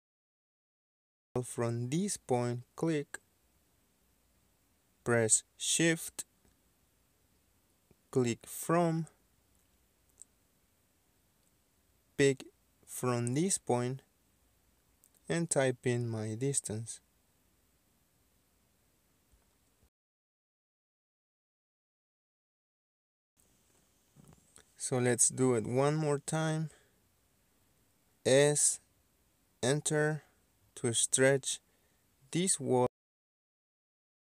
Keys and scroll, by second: 0.0 space, 6.7 Escape, 18.9 KP_1, 19.1 KP_3, 19.4 KP_9, 20.0 KP_2, 21.3 Return, 25.0-25.9 typing, 30.4 s, 31.0 space.